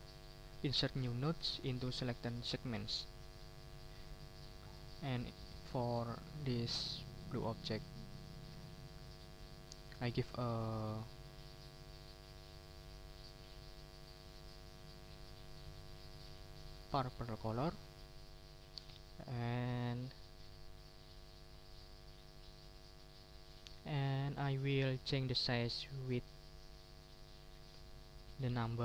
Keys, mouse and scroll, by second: 2.8 click, 4.7 click, 5.5 middle click, 5.9 click, 7.3 middle click, 8.2 click, 8.9-10.2 middle drag, 16.7 click, 17.4 click, 19.0-21.2 drag.